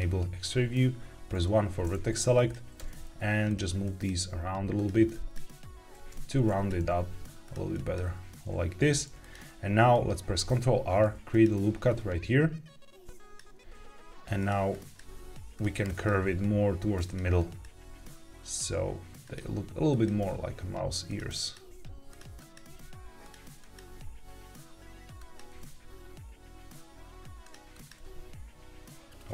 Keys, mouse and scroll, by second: 1.2 1, 2.1 click, 2.7 g, 3.4 click, 3.8 click, 4.1 g, 4.7 click, 5.0 click, 5.4 g, 6.0 Escape, 6.4 click, 6.7 g, 7.4 click, 7.6 click, 8.0 g, 9.1 click, 10.3 ctrl+r, 13.0 click, 13.0 right click, 13.6 g, 14.3 click, 14.6 click, 15.0 g, 15.5 click, 15.8 click, 16.1 g, 17.0 click, 17.3 click, 17.7 g, 19.1 click, 19.8 click, 20.0 g, 21.0 click, 21.3 click, 21.6 g, 22.3 click, 22.6 g, 23.1 click, 23.5 click, 23.8 g, 25.1 Tab, 25.1 click, 25.4 g, 27.3 click, 27.6 click, 27.9 g, 29.1 click.